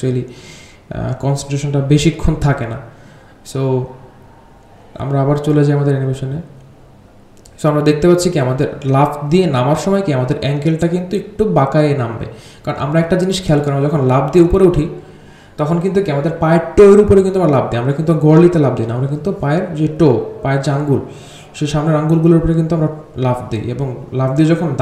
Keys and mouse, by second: 0.4-1.9 drag, 2.3 r, 4.9-8.7 drag, 10.9 click, 11.3 r, 14.2-14.6 drag, 14.9 r, 15.8 click, 16.8 r, 18.6 click, 23.8 click.